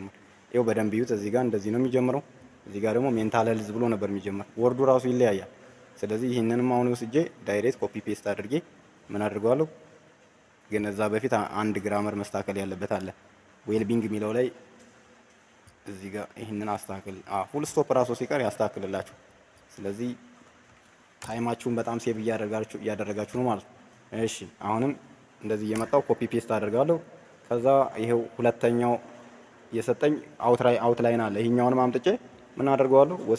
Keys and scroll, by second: 21.2 ctrl+c, 25.6 ctrl+v.